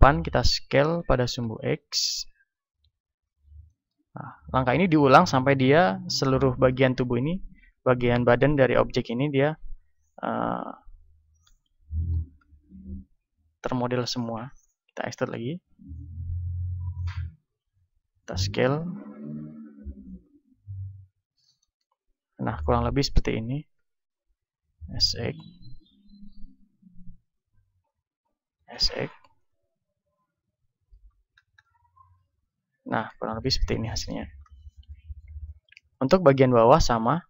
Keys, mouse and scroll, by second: 1.1 s, 3.2-5.0 drag, 4.4 z, 5.0-12.1 middle drag, 12.1 e, 17.7-21.3 drag, 17.9 s, 21.3-23.5 middle drag, 21.7 z, 23.5 s, 24.9-29.2 drag, 28.5 s, 29.5-31.3 drag, 30.9 z, 31.3-33.3 middle drag, 33.9-37.2 middle drag.